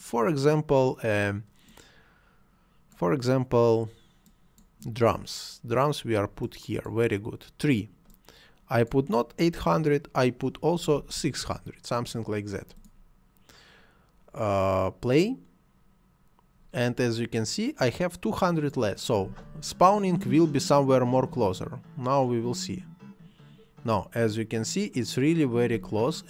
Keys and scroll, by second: 10.8 6, 10.9 0, 11.4 Return, 19.2 space, 25.7 space.